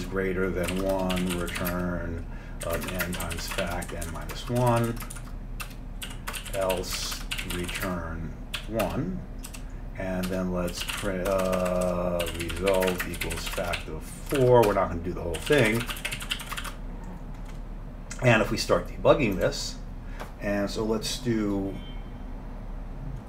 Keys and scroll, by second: 0.0-17.2 typing, 10.3 Return.